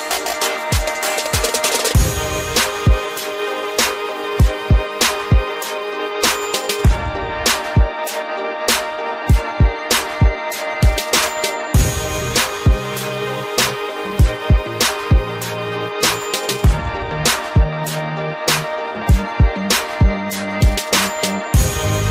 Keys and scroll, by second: 12.0 ctrl+alt+z.